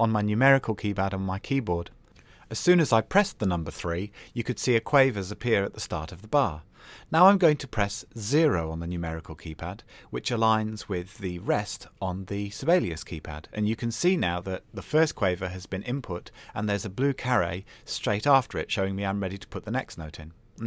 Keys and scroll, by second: 1.0 KP_3, 8.6 KP_0, 18.0 KP_4.